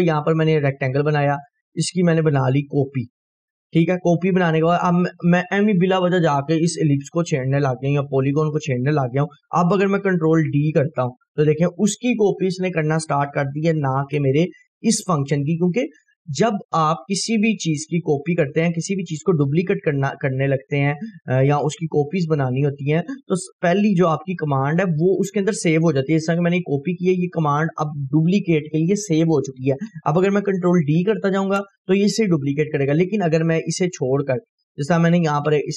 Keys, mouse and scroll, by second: 2.7-3.3 scroll up 2, 3.6-5.1 ctrl+drag, 4.8-6.8 ctrl+right drag, 7.1-8.6 drag, 10.7 ctrl+d, 15.3 scroll down 1, 16.9-17.9 click, 17.6 Delete, 18.2 scroll up 1, 19.5-20.2 drag, 23.8-27.5 drag, 27.5 ctrl+right click, 30.7 ctrl+d, 34.5-35.2 click.